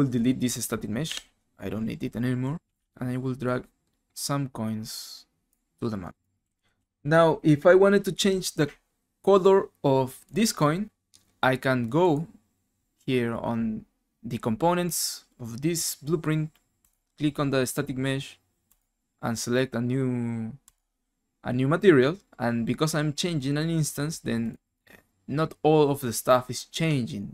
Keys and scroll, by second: 1.1 Delete, 6.2-7.3 typing.